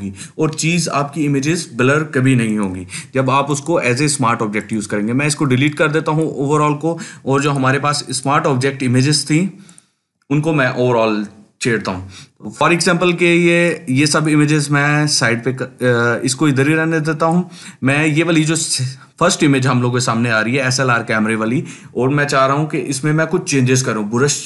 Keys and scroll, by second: 3.9 Delete, 4.7 Delete, 6.1 Delete.